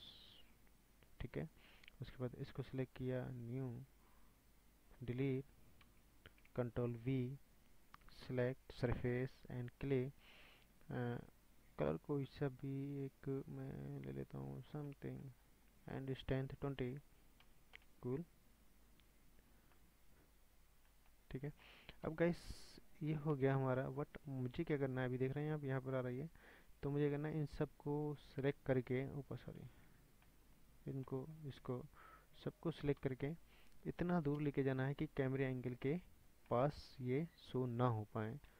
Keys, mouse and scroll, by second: 2.3 click, 4.1-5.5 drag, 5.9 Delete, 6.8 ctrl+v, 8.7 click, 11.2 click, 14.9-15.3 middle drag, 15.3 scroll down 1, 15.4-17.8 middle drag, 17.8-20.4 drag, 19.7-20.9 middle drag, 20.5 drag, 20.9 scroll down 2, 21.1-22.0 middle drag, 21.3-22.0 drag, 22.0 KP_1, 23.3 KP_0, 24.1 scroll up 1, 24.3-27.1 drag, 27.3-28.1 shift+drag, 29.0-29.8 middle drag, 29.8 ctrl+z, 30.0 scroll down 5, 30.3-31.6 middle drag, 31.6 shift+drag, 33.0 KP_1, 33.7-34.4 scroll down 1, 34.4 KP_0, 35.4-36.5 scroll down 6, 36.5-37.4 shift+middle drag, 37.4-38.5 drag.